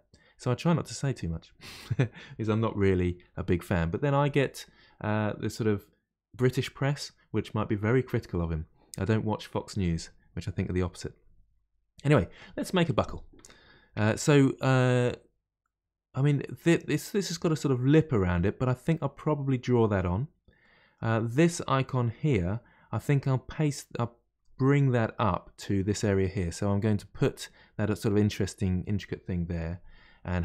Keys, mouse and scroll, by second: 2.9 click, 3.2 g, 15.6-18.6 middle drag, 20.6-23.6 middle drag.